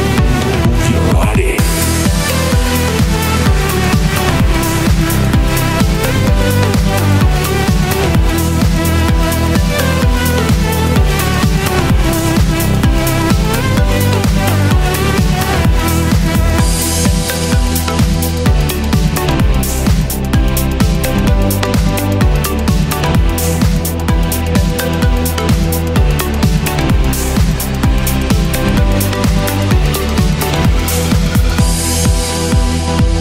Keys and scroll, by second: 23.6 super+z, 30.0 super+r.